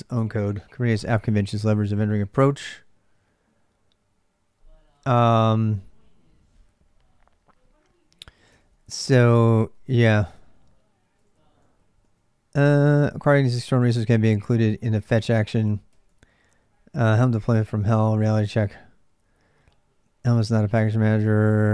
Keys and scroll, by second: 8.6 j, 9.2 ctrl+[, 9.3 ctrl+j, 10.1-17.3 typing, 18.8 j, 19.0 j, 19.7 j, 20.3 ctrl+[, 20.4 ctrl+j, 20.9-21.7 typing.